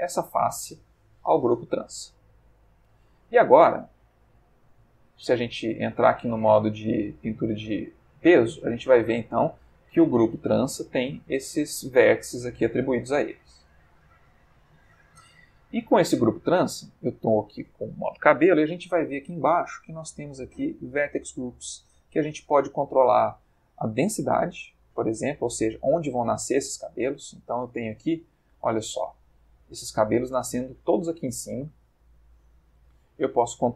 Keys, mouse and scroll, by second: 0.1 click, 1.9 Tab, 4.3 click, 5.8 ctrl+Tab, 6.9 click, 8.4-9.4 middle drag, 10.9 middle click, 12.2-13.4 middle drag, 13.6 ctrl+Tab, 14.6 click, 18.7 middle click, 20.6 click, 21.1 middle click, 24.0 click, 24.7 click, 25.7 middle click, 26.5-27.0 ctrl+scroll up 2, 27.3-27.8 ctrl+scroll up 2.